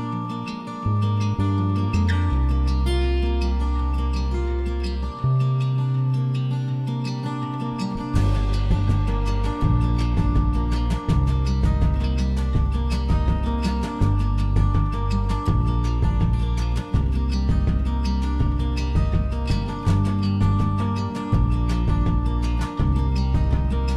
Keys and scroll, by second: 17.8 BackSpace, 21.8 m.